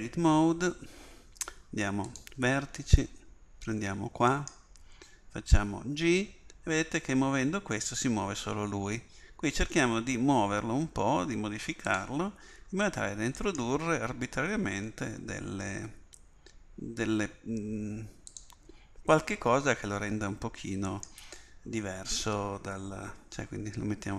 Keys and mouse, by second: 4.3-8.1 drag, 6.0 g, 13.4-15.9 drag, 14.5 g, 20.9-22.8 drag, 22.2 g.